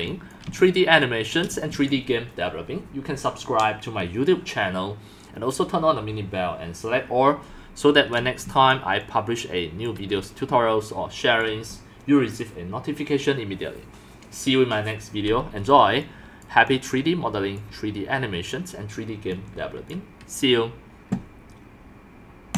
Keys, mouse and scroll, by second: 0.3-0.7 drag, 0.7 shift+middle click, 1.3-2.3 typing, 2.0 click, 8.0-12.0 typing, 8.7 click, 16.0 drag, 16.2 typing, 16.5-17.5 drag, 19.2 x, 19.6 c, 20.0-21.7 drag, 22.5 click.